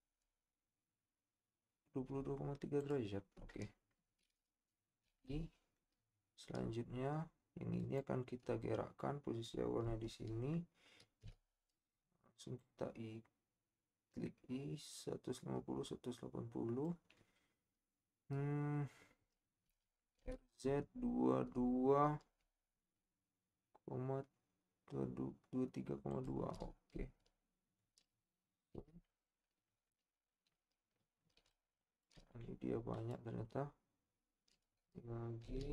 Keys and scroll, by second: 5.0 i, 11.4 i, 19.9 r, 20.2 z, 28.7 i, 35.6 i.